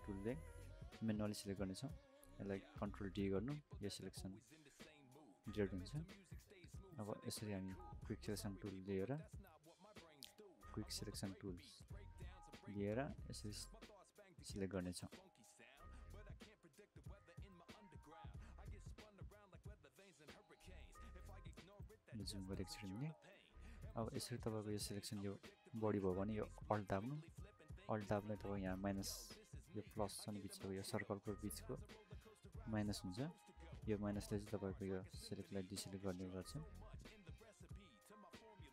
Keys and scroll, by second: 3.3 ctrl+d, 10.0 ctrl+d, 20.5 ctrl+d, 38.5 alt+[.